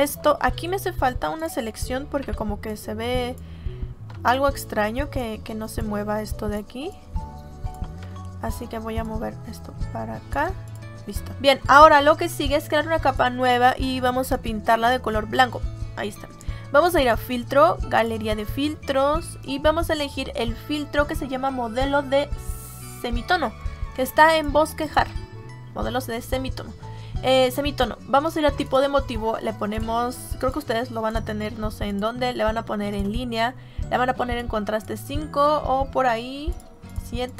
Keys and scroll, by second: 2.1 m.